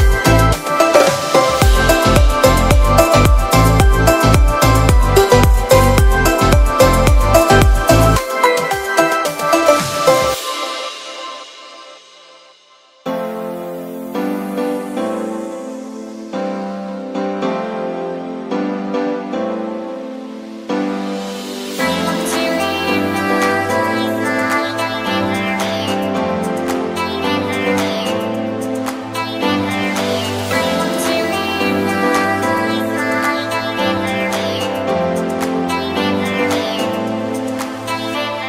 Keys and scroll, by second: 12.6 z, 13.7 v, 17.2 b, 31.3 super+z, 32.9 super+z, 35.6 e, 37.5 [.